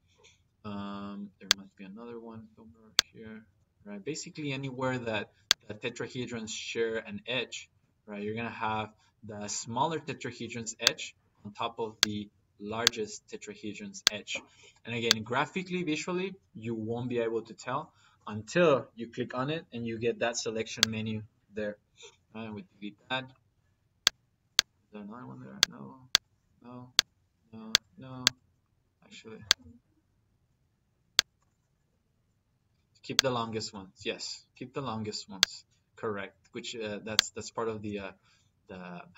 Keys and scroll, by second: 3.3 Delete, 7.1 Delete, 21.9 Delete.